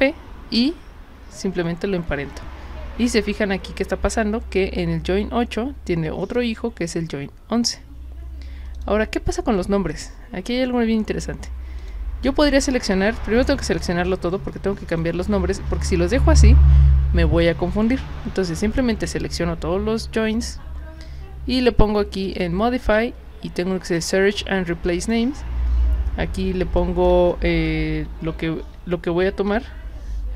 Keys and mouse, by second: 8.7 click, 11.8 click, 14.9 shift+click, 22.3 click, 25.0 click, 26.8 click, 27.7-29.5 typing.